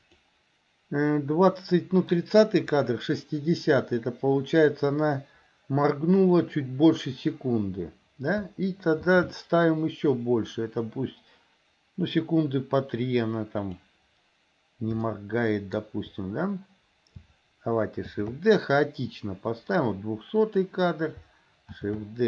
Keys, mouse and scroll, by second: 9.1 shift+d, 15.2-15.9 shift+middle drag, 18.2 shift+d, 21.9 shift+d.